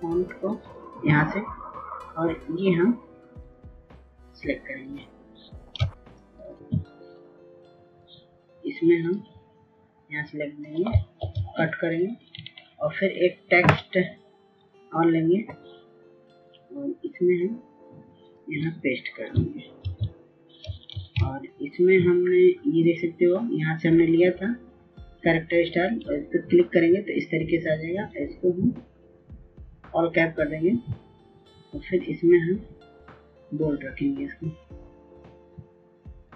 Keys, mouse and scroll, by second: 8.1 ctrl+space, 8.4 click, 13.6 ctrl+x, 14.2 click, 15.6-16.3 scroll up 1, 17.0 click, 22.3 ctrl+v, 23.4 ctrl+a, 26.3 click, 35.8 right click.